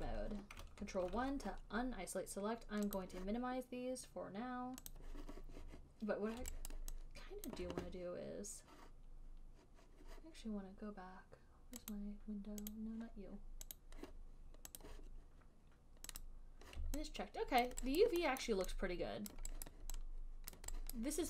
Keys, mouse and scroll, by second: 0.0 alt+click, 0.2 alt+right click, 1.0 alt+click, 1.4 ctrl+1, 3.2 click, 5.2 click, 7.0 alt+click, 7.8 alt+click, 12.2 click, 12.9 click, 13.0 alt+click, 14.1 click, 15.1 click, 16.5 click, 18.0 alt+click, 18.3 alt+click, 18.8 alt+middle click, 19.3 alt+right click, 19.6 alt+click, 20.0 alt+right click, 20.9 alt+click.